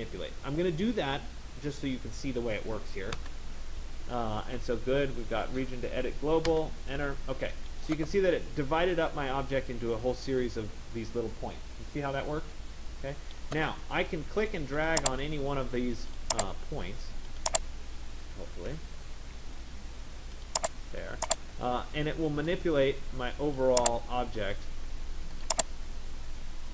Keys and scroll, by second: 2.9 Return, 18.8 Escape.